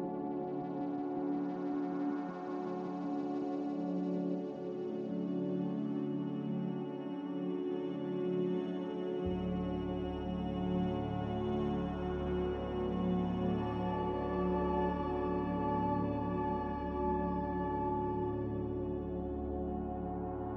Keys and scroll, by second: 4.0 m, 6.8 a, 12.9 z, 17.1 ctrl+z.